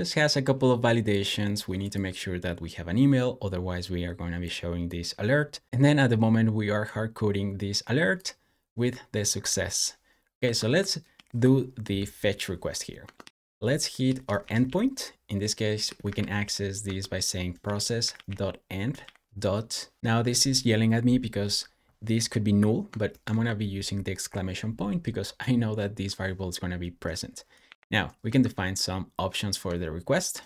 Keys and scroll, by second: 10.3 Escape, 11.0 super+/, 12.9 Escape, 13.1-18.9 typing, 20.0 BackSpace, 23.1 shift+1, 30.2-30.4 typing.